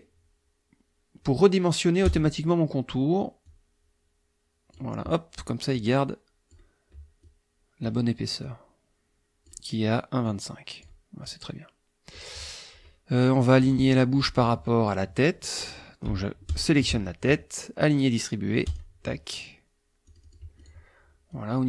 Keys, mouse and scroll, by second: 2.1 click, 3.4-4.9 drag, 5.7-6.7 drag, 7.2-8.0 drag, 8.4-9.7 drag, 10.3-11.0 drag, 11.3-12.3 drag, 16.5 shift+click, 18.7 click, 20.1-20.9 drag, 21.3-21.6 drag.